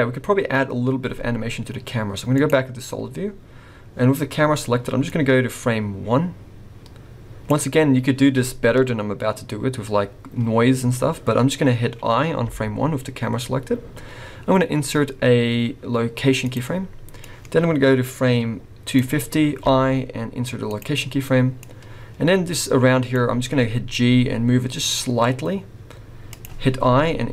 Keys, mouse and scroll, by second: 0.4-1.3 scroll up 1, 1.3 z, 2.9 scroll down 3, 5.1 click, 7.9-10.9 scroll up 2, 17.2 click, 19.6 i, 21.6 click, 24.1 g, 26.8 i.